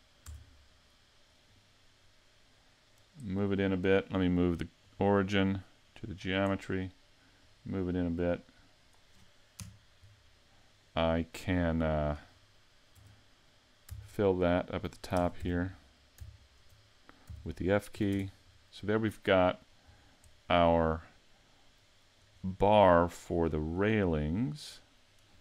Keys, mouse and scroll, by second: 0.3 Tab, 1.5 right click, 2.0 middle click, 4.8 click, 7.4 click, 9.6 KP_Decimal, 10.8 middle click, 13.0 Tab, 14.0 alt+right click, 14.6 alt+right click, 15.2 ctrl+Tab, 16.3 alt+right click, 17.3 f, 17.9 a, 18.1 Tab, 18.5 scroll down 2, 19.0 middle click, 19.9-20.3 scroll down 4, 20.3 middle click, 22.4 scroll up 3, 22.8 middle click, 23.7 scroll up 1, 24.4 middle click.